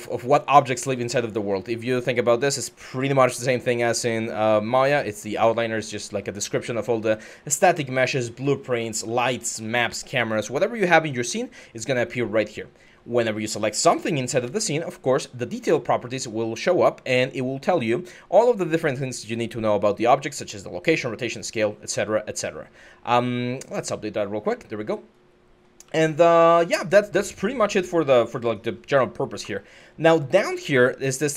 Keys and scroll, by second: 0.3-1.2 typing, 8.3-9.6 typing, 25.3-27.9 typing.